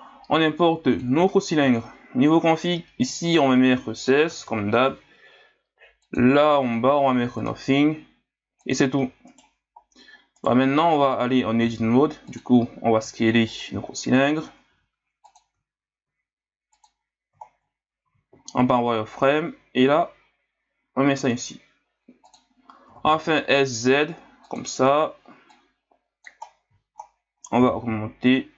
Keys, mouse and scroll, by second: 2.6-6.2 drag, 6.6-8.7 drag, 9.3 right click, 9.8-10.4 scroll down 4, 10.4 right click, 10.8 Tab, 11.6 s, 12.6-13.0 scroll up 4, 13.0 s, 13.8-14.7 ctrl+scroll up 1, 14.7 g, 15.6-16.0 scroll up 1, 16.0 s, 17.0 scroll up 1, 17.4 scroll down 4, 18.1 z, 18.4 scroll down 1, 18.8-19.2 scroll up 2, 19.4 s, 22.9 s, 25.5 click, 26.4 scroll down 2, 27.1-27.6 scroll down 2, 27.6 s.